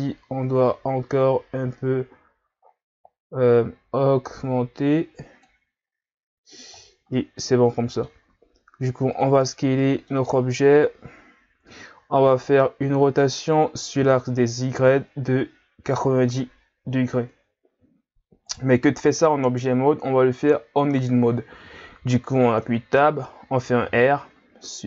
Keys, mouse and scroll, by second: 6.9 scroll down 1, 7.1-8.2 middle drag, 8.2 s, 9.6 scroll down 2, 9.8-14.0 middle drag, 14.0 r, 22.7 Tab, 23.8 r.